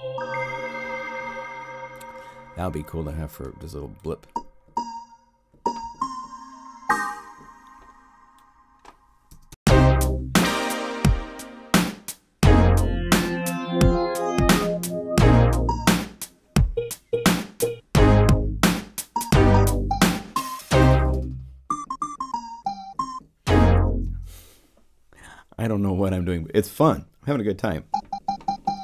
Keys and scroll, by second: 9.2 0, 9.4 Home, 24.0 0.